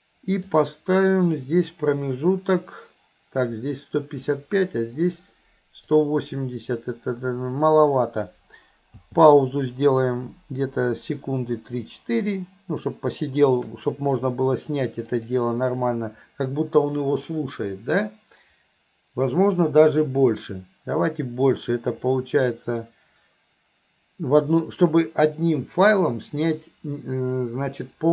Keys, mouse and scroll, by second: 2.0-6.0 drag, 15.2 click, 22.1 middle click.